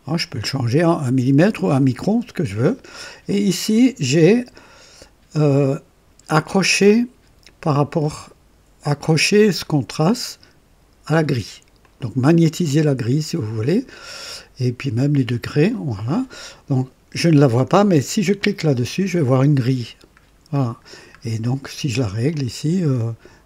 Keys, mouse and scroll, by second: 3.2 click, 3.7 click, 11.7 click, 15.6 click, 18.3 click, 20.2 scroll up 2, 20.8 scroll down 2, 22.2 click, 23.1-23.4 scroll down 3.